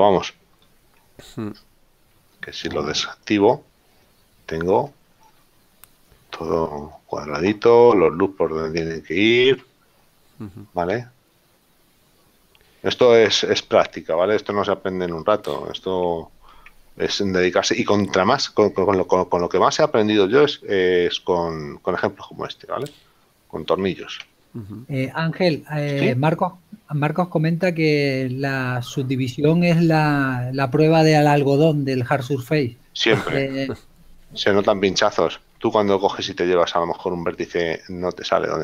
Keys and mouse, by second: 3.2 click, 4.2 middle click, 24.7 Tab, 27.6 middle click.